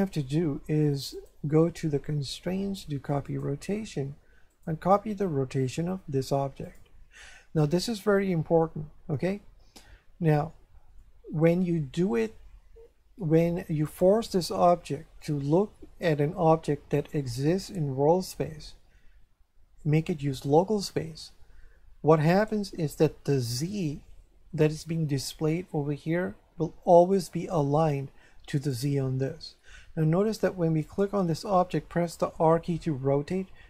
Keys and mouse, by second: 1.1 click, 3.3 click, 4.5 click, 6.6 click, 11.0 shift+middle click, 13.8 right click, 22.3 right click, 28.7 right click, 30.8 right click, 32.3 r.